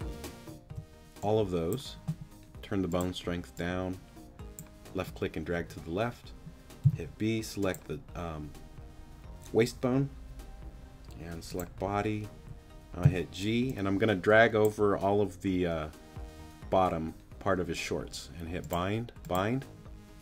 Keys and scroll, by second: 0.7 b, 6.8 b, 12.3 g.